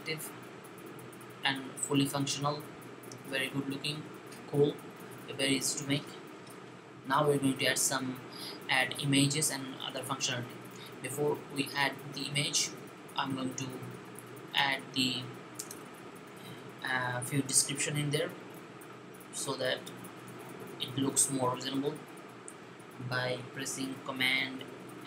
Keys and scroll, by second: 24.9 super+3.